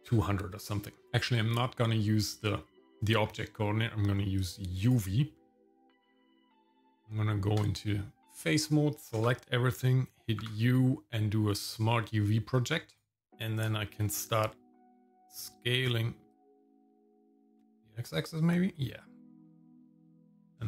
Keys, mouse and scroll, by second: 4.4 click, 6.8 Tab, 9.2 a, 10.4 u, 13.3 Tab, 13.9-15.7 drag, 16.3 click, 17.1 scroll up 2, 17.4 click, 18.2-19.9 drag, 20.1 scroll up 2, 20.4 scroll down 4.